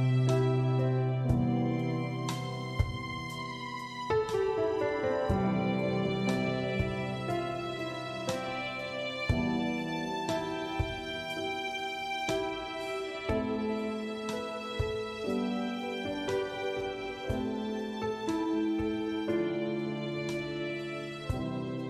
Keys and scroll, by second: 3.7 shift+-, 5.8-7.8 typing.